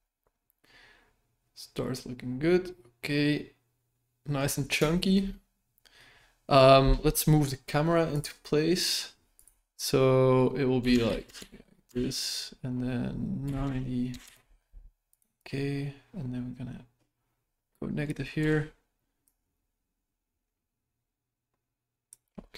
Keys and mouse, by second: 0.6-4.4 middle drag, 4.9 shift+middle click, 8.1 click, 9.3-15.2 drag, 15.4-18.1 drag, 18.3 KP_0, 19.3-22.1 drag.